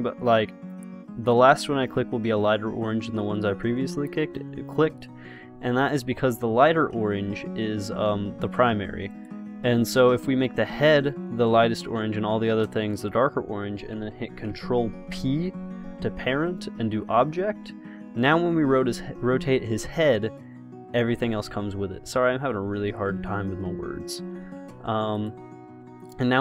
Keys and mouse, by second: 15.4 ctrl+p, 18.4 r, 22.2 ctrl+z.